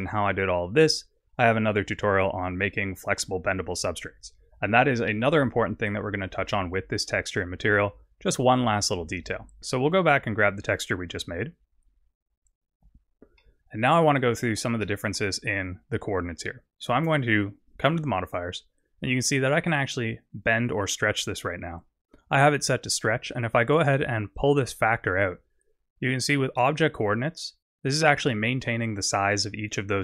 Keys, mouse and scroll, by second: 6.2 click, 7.2 click, 9.6 middle click, 12.8-13.4 scroll up 6, 13.4 middle click, 14.2 scroll up 5, 14.8 middle click, 17.7 click, 19.8 click, 22.2 scroll down 5, 24.4 click, 28.3 middle click.